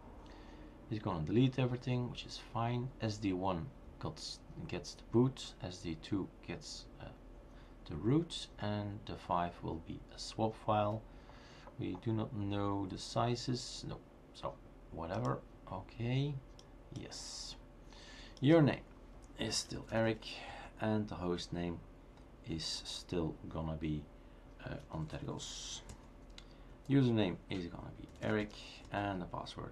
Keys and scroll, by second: 19.6-21.0 typing, 24.6-25.3 typing, 27.3-29.7 typing.